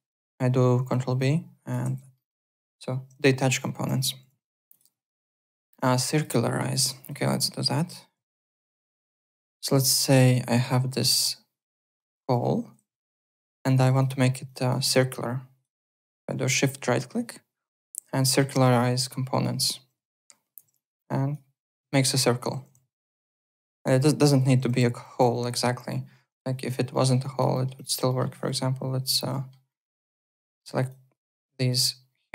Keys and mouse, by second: 0.8 ctrl+b, 1.2 click, 1.8 ctrl+z, 2.1 alt+middle click, 4.2 alt+Tab, 4.7 alt+click, 5.7 alt+Tab, 6.1 alt+click, 6.4 alt+middle click, 6.7 alt+Tab, 7.0 alt+click, 7.2 alt+middle click, 7.9-9.0 typing, 8.6 alt+middle click, 9.1 click, 9.3 Tab, 9.6 click, 12.0 Tab, 12.3 Delete, 12.6-13.5 typing, 13.3 click, 14.8 alt+click, 15.7 alt+right click, 16.5 shift+right click, 20.7 alt+click, 22.6 w, 22.9 alt+click, 24.2 alt+click, 25.1-26.0 typing, 25.9 alt+click, 26.9 alt+middle click, 27.2 alt+click, 27.5 alt+middle click, 27.7 alt+click, 28.1 alt+middle click, 28.3 alt+right click, 29.3 alt+middle click, 29.9 alt+click, 30.5 click, 30.8 shift+click, 31.7 shift+click.